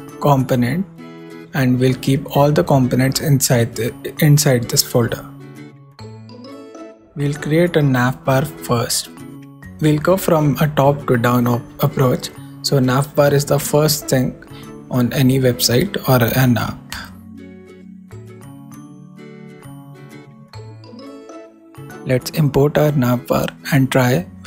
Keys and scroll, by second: 0.0-0.9 typing, 7.1 super+Return, 7.3 super+s, 7.8 super+Down, 10.0 shift+Right, 10.4 shift+i, 10.7 shift+', 11.7-12.6 typing, 13.1 super+r, 15.9 alt+shift+Left, 16.6 alt+shift+super+d, 17.5 shift+super+d, 17.6 shift+super+n, 17.9 shift+a, 19.2 super+r, 21.2 super+Up, 23.7 super+Down, 24.3 super+Right.